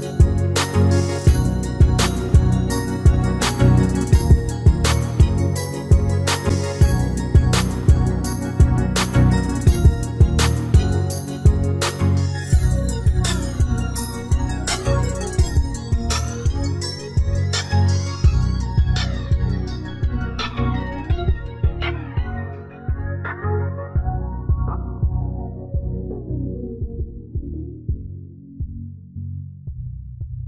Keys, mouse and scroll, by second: 3.0-7.4 middle drag, 7.8 middle click, 8.7-12.0 middle drag, 14.0 middle click, 16.7 middle click.